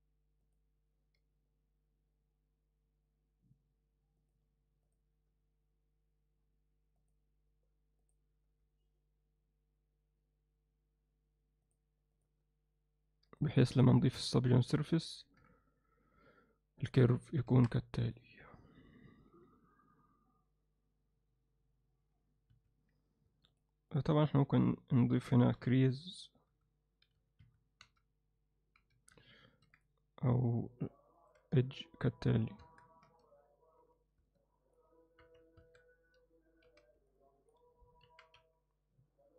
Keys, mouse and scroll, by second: 1.2 g, 5.3 g, 12.3 g, 13.8 Tab, 15.2 ctrl+2, 17.5 Tab, 19.3 g, 25.2 shift+e, 27.9 z, 28.8 z, 29.5 ctrl+r, 31.4 z, 32.6 Tab, 33.1 z, 33.8 z, 34.4-34.8 alt+middle drag, 35.2 KP_3, 35.6 Tab, 36.7 z, 37.1 alt+middle click, 38.1 KP_1.